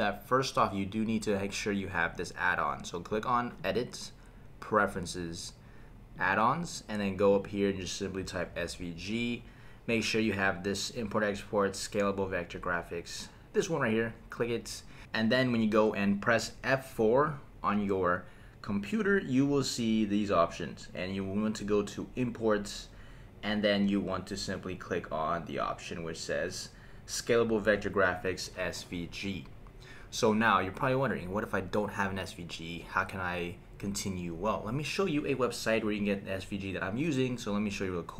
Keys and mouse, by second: 3.6-5.1 drag, 17.0 F4.